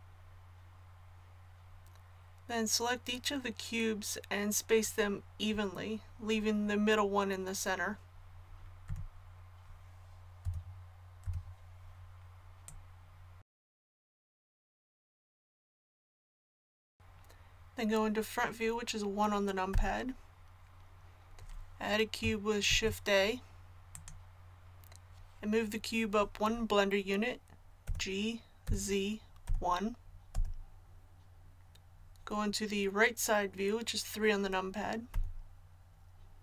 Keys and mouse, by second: 8.8 a, 10.4 l, 11.2 l, 12.6-13.6 drag, 13.8-16.3 typing, 14.2 click, 19.7 KP_1, 22.6 shift+a, 27.8 g, 35.1 KP_3.